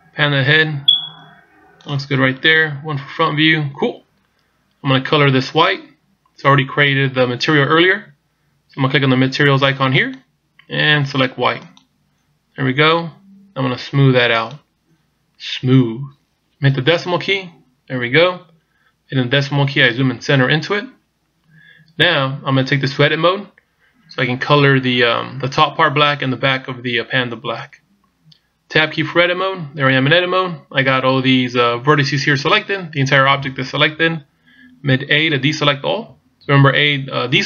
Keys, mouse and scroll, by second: 2.6 KP_1, 10.1 click, 14.4 click, 15.6-16.0 scroll up 1, 16.0-16.3 scroll down 1, 17.0 KP_Decimal, 26.5-27.3 scroll down 2, 27.3 scroll down 1, 29.4 Tab, 36.1 a.